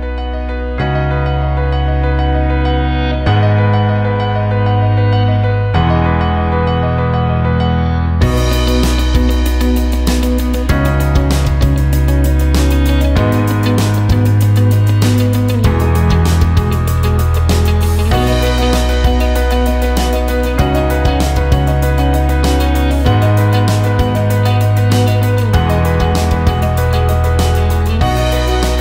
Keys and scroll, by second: 0.3 ctrl+space, 23.1-25.9 typing, 28.1 Home.